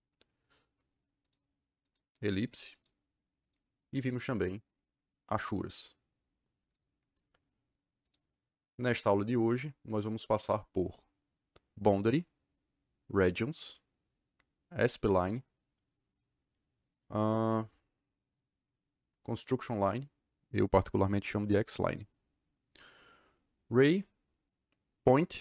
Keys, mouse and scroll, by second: 1.1 click, 1.8 click, 2.7 click, 6.6 click, 7.9 click, 9.4 click.